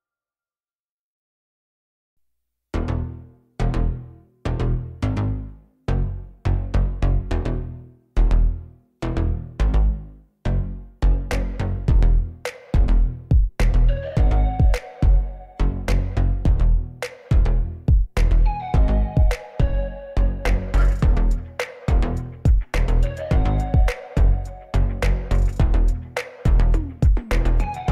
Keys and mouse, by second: 0.9 click, 1.8 middle drag, 2.5-3.0 drag, 3.4-4.7 drag, 5.3-5.7 middle drag, 6.1 KP_7, 6.9 g, 10.7 KP_1, 11.8 middle drag, 13.1 Tab, 13.7 click, 14.8 g, 14.8 z, 15.5 click, 15.6-16.3 middle drag, 17.5-19.4 middle drag, 19.9 click, 20.2 middle click, 20.5 g, 20.6 z, 21.4 click, 22.1 Tab, 22.5 middle drag, 23.1 KP_1, 23.6 KP_7, 24.3 shift+middle click, 25.8 shift+d.